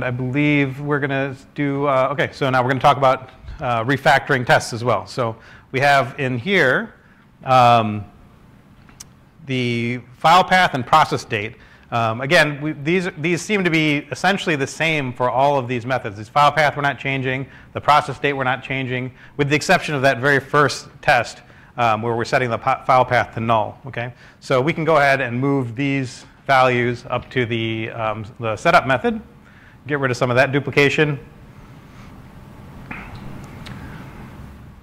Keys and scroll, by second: 22.2 super+1, 27.4-28.3 typing, 31.4 typing, 33.7 typing.